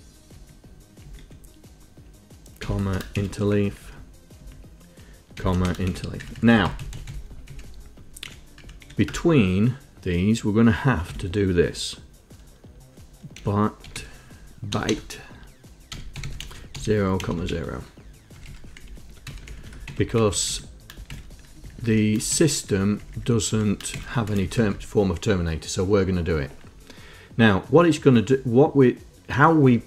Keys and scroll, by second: 0.6 Down, 1.4 Down, 1.5 End, 2.9 ,, 3.5 shift+Insert, 3.9 Down, 4.7 Down, 5.7 ,, 6.2 shift+Insert, 6.5 Up, 7.1 Up, 7.4 Up, 8.5 End, 8.9 Up, 9.1 End, 9.4 Return, 11.4 Tab, 13.4-18.2 typing, 18.6 Home, 19.1 shift+Down, 19.6 Up, 20.5 Down, 20.8 Down, 21.4 shift+Insert, 21.8 Down, 22.0 Down, 22.6 shift+Insert, 23.0 Down, 23.2 Down, 23.3 Down, 23.8 Up, 24.2 shift+Insert, 24.6 Up, 24.7 Up, 25.0 Up.